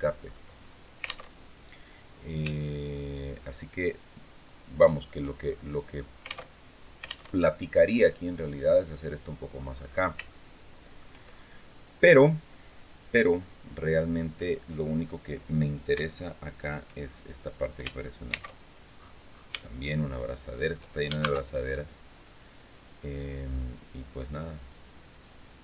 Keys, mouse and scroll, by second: 0.0-0.7 scroll up 4, 1.0 alt+Tab, 2.3-5.0 shift+drag, 5.1-5.4 shift+scroll down 2, 6.2 alt+Tab, 7.0 alt+Tab, 9.5-9.9 scroll up 2, 10.0 shift+middle click, 11.0-11.5 shift+scroll up 3, 11.5 scroll down 2, 16.7 shift+scroll down 2, 18.0 shift+c, 18.7 scroll up 1, 19.3 shift+scroll up 1, 19.4-20.7 shift+middle drag, 20.9 shift+a, 21.9 click, 24.0-25.6 drag.